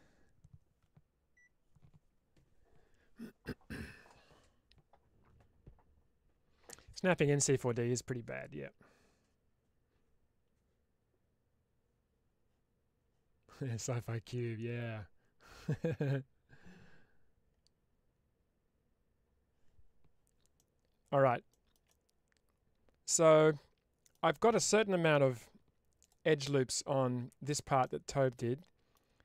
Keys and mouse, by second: 20.4 middle click, 21.4 shift+middle click, 21.8-24.0 middle drag, 25.4 2, 27.7-28.8 middle drag.